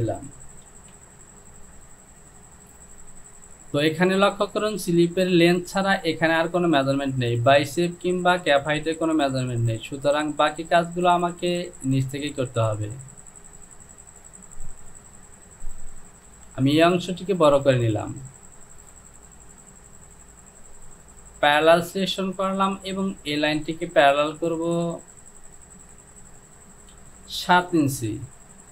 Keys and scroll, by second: 0.8 Home, 16.4 Return, 27.1 Down, 28.6 KP_7.